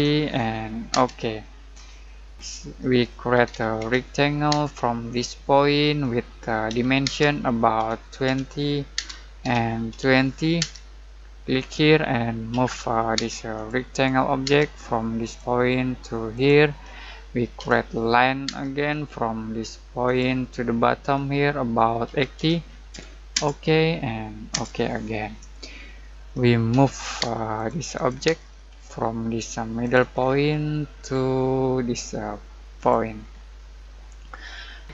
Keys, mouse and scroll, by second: 0.0-0.9 typing, 1.8 middle click, 3.1-4.5 typing, 5.1 click, 6.6-10.6 typing, 11.5 click, 12.5-13.1 typing, 13.5 click, 14.4 space, 15.2 click, 17.5 l, 18.4 space, 20.0 click, 22.0-22.3 typing, 23.3 Return, 25.2 scroll down 1, 25.5 middle click, 26.7 m, 27.2 space, 27.5 click, 28.2 space, 28.4 scroll up 1, 29.8 click, 30.1 scroll down 1, 30.5 middle click, 30.9 scroll up 1, 32.7 click, 33.2 scroll down 1, 33.5-34.9 middle drag.